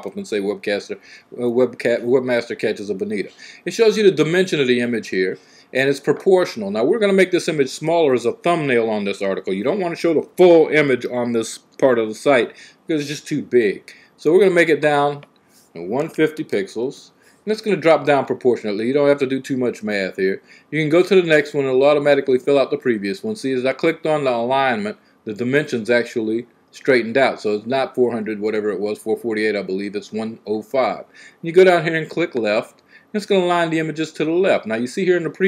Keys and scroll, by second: 15.5-17.1 typing.